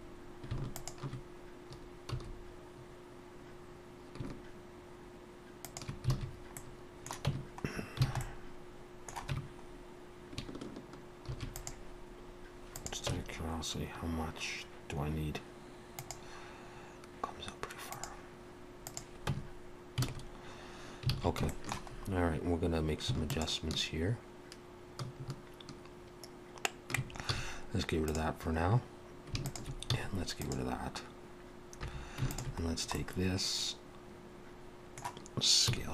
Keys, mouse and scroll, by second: 0.8 alt+shift+click, 2.1 s, 6.2 alt+a, 6.6 middle click, 7.3 Tab, 7.8 scroll down 2, 8.1 alt+a, 8.2 middle click, 9.4 Tab, 9.7 scroll up 1, 11.3 ctrl+r, 13.1 Tab, 13.4-13.8 scroll down 2, 18.9 click, 19.3 Tab, 21.1 alt+a, 21.5 shift+middle click, 21.9 scroll up 1, 23.1 scroll up 2, 23.3 alt+shift+click, 29.4 x, 29.5 alt+shift+click, 29.9 x, 31.9 3, 32.3 alt+shift+click, 32.7-33.1 scroll down 2, 33.0 middle click, 35.7 s.